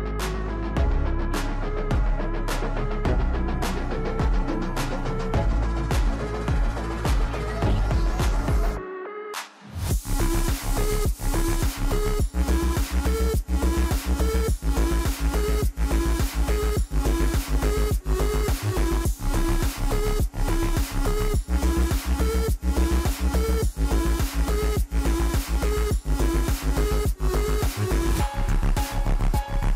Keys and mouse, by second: 4.6-9.3 drag, 9.8 Tab, 11.2 middle click, 15.3 Tab, 15.9 click, 21.9 n, 23.3 click, 24.8-29.7 drag.